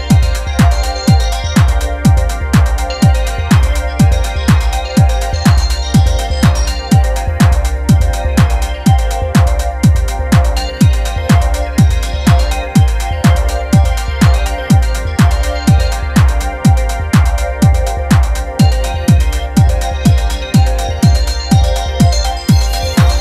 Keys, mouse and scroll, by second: 0.0-5.3 typing, 4.9 scroll down 1, 5.1 middle click, 5.9 Tab, 6.0 middle click, 6.1 Tab, 6.6 a, 9.4 click, 9.6 Tab, 9.7-11.3 shift+middle drag, 11.8 click, 12.3 click, 12.7 click, 13.0 shift+middle click, 13.6 middle click, 14.3 click, 14.4 middle click, 14.7 Tab, 15.0 shift+n, 15.3 Tab, 15.9 click, 16.4 click, 16.6 middle click, 16.6 a, 16.8-18.1 middle drag, 18.1 click, 18.3 f, 18.6-18.9 scroll up 3, 18.6 shift+middle click, 18.8 middle click, 18.9-19.3 shift+middle drag, 19.3-20.0 drag, 20.7 shift+middle drag, 20.9-21.3 scroll down 2, 21.0 shift+middle click, 21.3 shift+middle click, 21.4 scroll up 3, 21.6-22.7 drag.